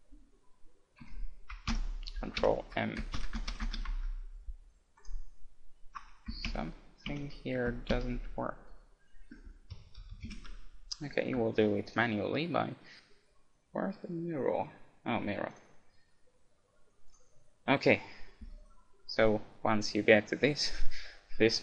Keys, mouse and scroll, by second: 3.5 m, 5.0-6.9 right drag, 11.9-13.6 drag.